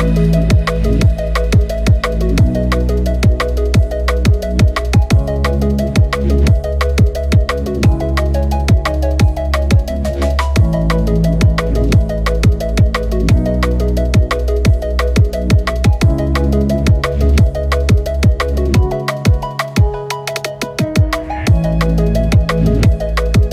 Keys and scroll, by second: 5.9 alt+b, 8.9 ctrl+i, 9.9 ctrl+KP_0, 10.1 KP_Subtract, 12.4 ctrl+alt+shift+e.